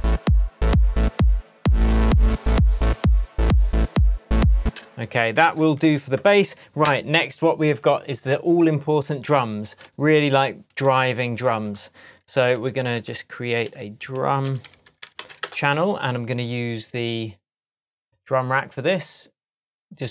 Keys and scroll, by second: 4.6 space, 5.4 super+s, 6.2 super+Tab, 12.3 shift+super+t, 13.6 super+r, 14.4 shift+super+r, 14.6 shift+super+d, 15.0 u.